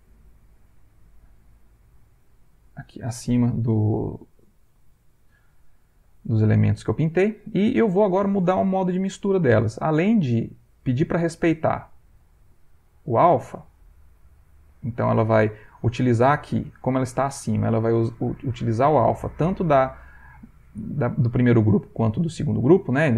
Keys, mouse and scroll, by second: 0.2 click, 1.2 click, 5.6 middle click, 6.7 ctrl+middle click, 10.3 click, 11.8 click, 12.3 click, 13.8 middle click, 14.4 ctrl+middle click, 18.5 click, 23.0 click.